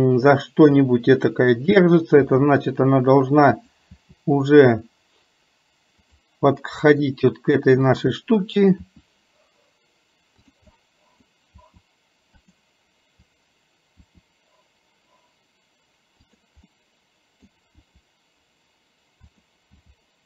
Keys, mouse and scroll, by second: 6.5 middle click, 10.8 middle click, 13.3 click, 16.8 middle click.